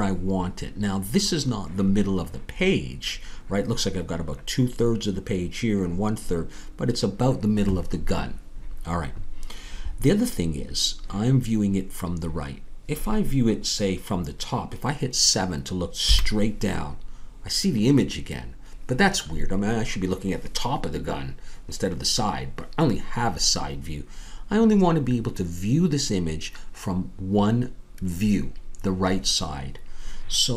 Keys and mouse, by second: 16.1 KP_7.